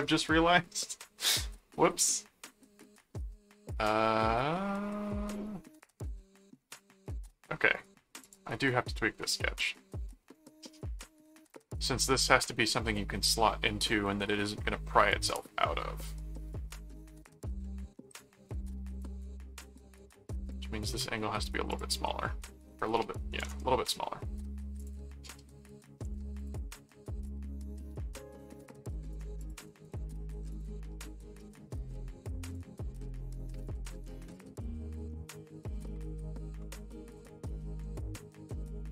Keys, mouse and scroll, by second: 7.7 right click, 8.2 ctrl+click, 9.2 ctrl+1, 10.1 ctrl+4, 20.5 click, 21.7 click, 24.8 click, 26.4 click, 27.3-29.1 drag, 29.4 click, 29.7 right click, 30.5 click, 32.4 click, 35.5 click, 37.1 click, 38.0 click, 38.6 click.